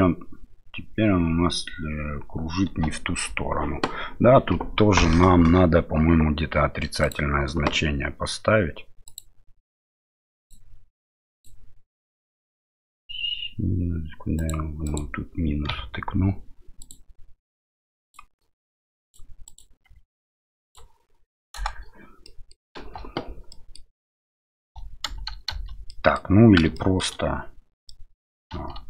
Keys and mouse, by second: 2.6 space, 7.0 click, 9.1 click, 10.4 click, 11.3 click, 14.5-16.9 drag, 18.0 click, 19.0-21.7 drag, 22.2 middle click, 22.8 space, 23.5 middle click, 25.9 middle click, 25.9 space, 26.7 middle click, 27.9 middle click.